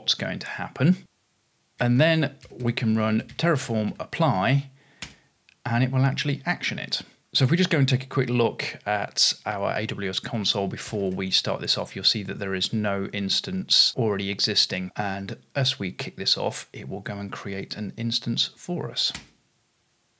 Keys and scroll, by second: 1.5-4.4 typing, 5.0 Return, 11.9-12.6 typing, 18.9-19.7 typing.